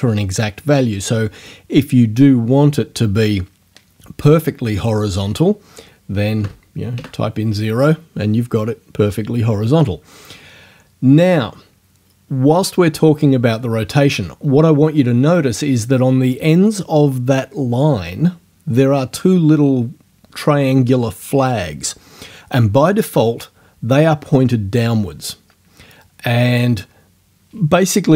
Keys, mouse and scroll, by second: 6.4 KP_0, 6.9 KP_Enter.